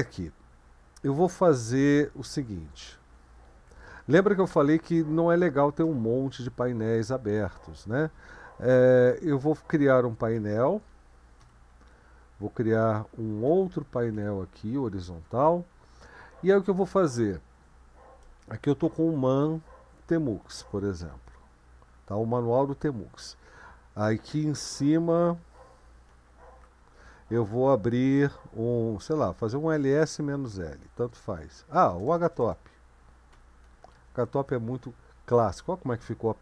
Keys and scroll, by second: 3.1 super+1, 10.4 ctrl+b, 11.4 %, 13.4 ctrl+b, 14.1 ", 18.4-21.0 typing, 21.2 Return, 26.1 ctrl+b, 26.6 Up, 29.3-30.8 typing, 31.9-34.5 typing.